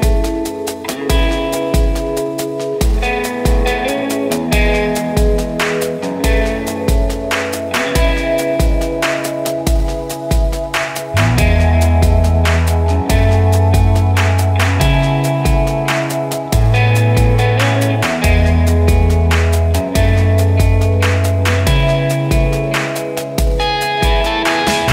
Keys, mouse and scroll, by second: 0.9-2.9 typing, 3.2 ctrl+space, 4.2-5.5 drag, 5.5 scroll down 1, 6.7 click, 7.0 scroll down 1, 7.5 click, 8.2 scroll up 1, 8.8 click, 10.6 scroll up 1, 11.3 click, 12.3 ctrl+space, 12.7 scroll up 1, 13.4 click, 14.2 shift+right click, 14.8-16.1 drag, 16.1 shift+right click, 16.6 scroll down 1, 17.2 click, 18.9 shift+right click, 20.0 ctrl+r, 20.4-22.1 drag, 22.9 right click, 22.9 right click, 23.8 click, 23.8-24.9 drag.